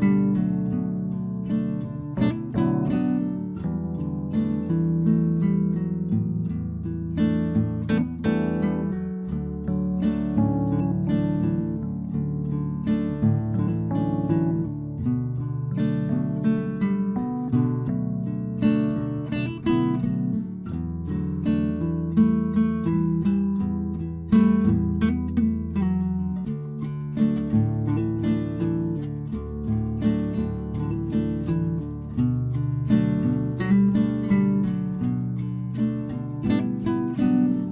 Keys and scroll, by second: 5.0 Return, 15.2 ctrl+z, 17.9 ctrl+t, 26.4 Return, 29.2 ctrl+j, 30.1 ctrl+t.